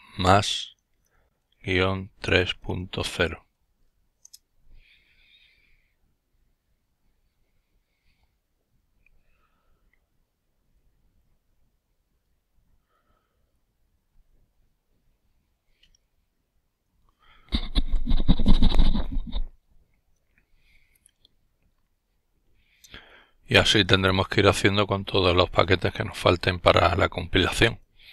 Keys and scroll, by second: 1.1-2.4 typing, 3.4-4.2 typing.